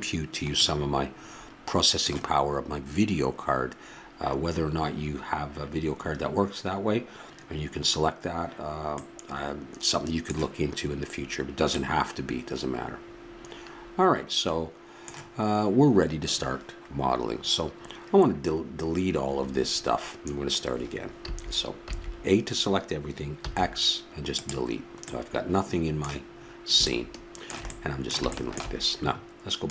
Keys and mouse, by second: 1.4-21.2 middle drag, 21.2 a, 21.9 a, 23.4 x, 27.4-29.7 middle drag.